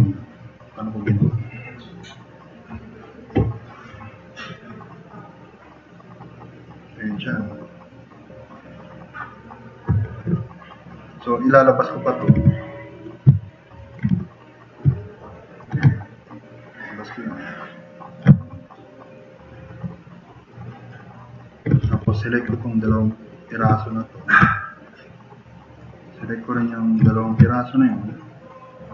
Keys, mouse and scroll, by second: 2.7 click, 10.1 drag, 10.6 click, 12.4 f, 13.8 drag, 14.1 e, 15.0 click, 18.5-19.1 drag, 21.8 3, 22.1 click, 23.1-23.4 drag.